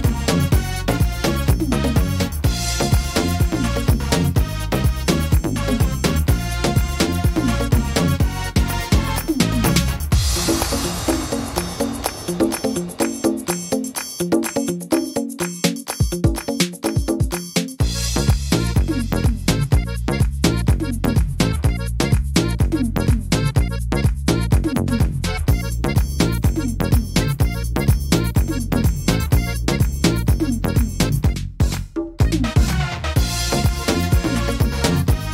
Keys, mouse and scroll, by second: 0.5 c, 4.3-4.8 scroll up 3, 4.3 x, 4.8 middle click, 5.2 scroll down 1, 6.7 e, 7.8 click, 9.5 shift+e, 10.9 click, 14.1 middle click, 14.8 shift+middle click, 15.7 shift+e, 16.8 click, 19.9 shift+e, 20.8 click, 22.6 shift+e, 24.1 ctrl+z, 25.0 right click, 26.8 shift+e, 28.1 click, 30.3 click, 33.0 right click, 33.6 shift+e, 35.0 ctrl+z.